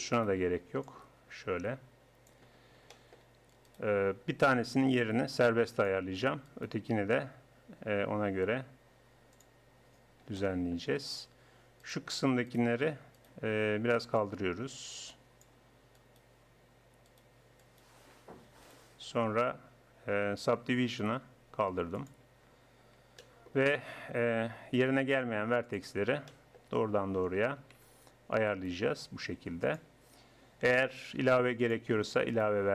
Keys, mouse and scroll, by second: 0.1-1.8 right drag, 0.9 click, 2.3 right click, 3.7-5.3 right drag, 4.9 g, 6.5 right click, 10.4-11.9 middle drag, 11.9-14.2 right drag, 15.1 click, 16.0 middle click, 16.2-17.7 right drag, 20.5 Tab, 22.5 Tab, 24.7 right click, 25.6 right click, 26.0 right click, 26.3 middle click, 28.5-30.3 right drag, 31.3 ctrl+r.